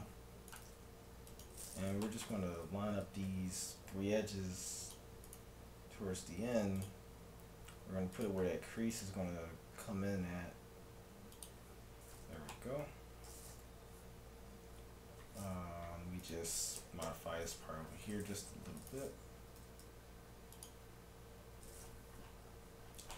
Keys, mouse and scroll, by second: 0.7 g, 2.1-4.8 middle drag, 2.2 right click, 3.3 g, 5.3-7.0 right drag, 5.6 g, 7.0 middle click, 7.0 right click, 7.0 g, 8.9-10.8 right drag, 9.2 g, 11.9-16.3 middle drag, 13.9 z, 14.4 z, 16.3-17.8 right drag, 16.8 KP_Enter, 17.1 KP_Decimal, 17.8-18.8 middle drag, 18.8-20.7 right drag, 19.6 g, 22.6-23.1 middle drag, 22.6 z.